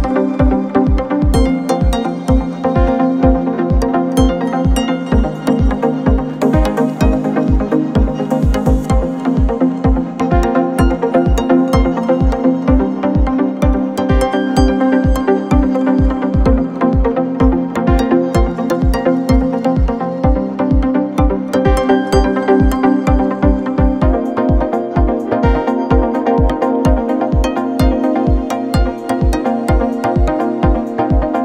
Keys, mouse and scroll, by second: 4.6 click, 5.0 middle click, 5.2 scroll up 1, 5.4 middle click, 5.8 click, 12.6 shift+a, 14.6 drag, 15.3 scroll down 3, 15.5-17.1 middle drag, 17.1-24.7 drag, 24.8 middle click, 25.1-25.4 scroll up 2, 25.4 click, 26.9-27.9 middle drag, 27.9-28.4 scroll down 1, 28.4 ctrl+t, 28.7-29.3 middle drag, 29.3-31.4 drag.